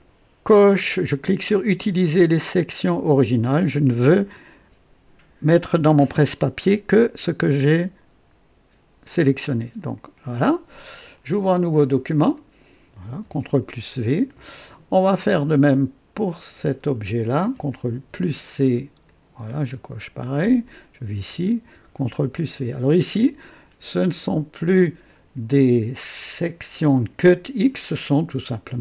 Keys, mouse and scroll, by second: 9.7 click, 12.1 click, 13.2 ctrl+v, 15.0 click, 16.6 click, 17.9 ctrl+c, 19.1 click, 20.6 click, 21.7 ctrl+v, 25.0 click.